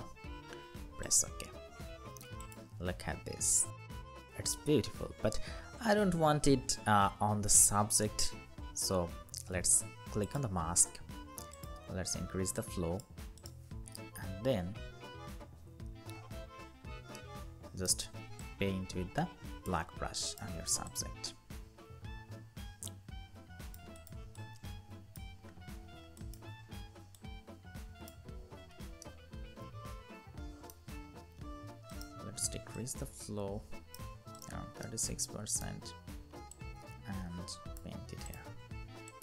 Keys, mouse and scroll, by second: 14.3 alt+scroll up 1, 16.8 x, 16.9 alt+right click, 24.1 double click, 25.2-26.0 scroll down 1, 28.7 right click, 34.6 alt+right click.